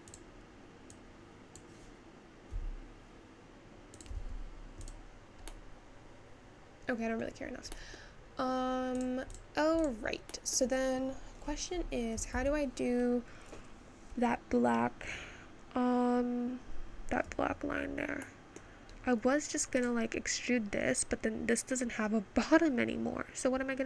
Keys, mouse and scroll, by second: 1.6 click, 2.6 s, 4.2 Tab, 4.9 click, 5.6-7.5 middle drag, 7.5-8.2 scroll down 1, 8.2 middle click, 8.7 scroll down 2, 9.3 click, 9.7 click, 10.5 middle click, 11.4-13.8 scroll up 2, 19.9 click.